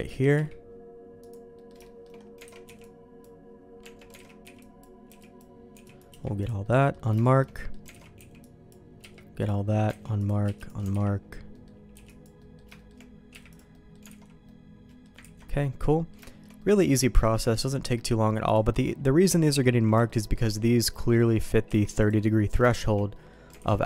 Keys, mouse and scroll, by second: 0.3 q, 1.5 middle click, 1.8 shift+middle click, 3.3 alt+a, 3.8 Tab, 4.4 alt+a, 4.4 b, 5.0 b, 5.7 b, 6.0 q, 6.6 middle click, 7.2 shift+click, 7.5 click, 8.1 alt+a, 8.7 b, 9.0 q, 9.9 alt+a, 10.1 click, 10.4 q, 10.9 alt+a, 11.5 middle click, 11.9 b, 12.3 middle click, 12.7 shift+middle click, 13.3 q, 13.7 middle click, 14.1 alt+a, 14.4 middle click, 15.2 ctrl+s, 15.4 middle click, 16.2 shift+middle click, 16.5 middle click, 17.1 shift+middle click, 17.6 middle click, 18.4 scroll down 1, 18.7 middle click, 19.4 shift+click, 19.6 click, 20.0 shift+middle click, 20.5 middle click, 22.0 q, 22.3 middle click, 22.6 shift+middle click, 23.1 middle click, 23.5 alt+a.